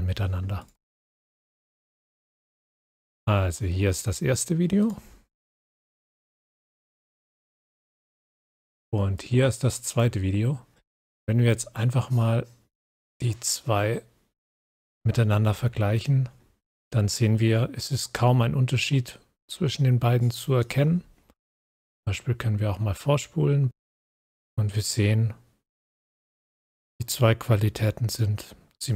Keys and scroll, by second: 9.4 scroll up 1, 10.7 scroll up 1, 12.8 scroll up 1.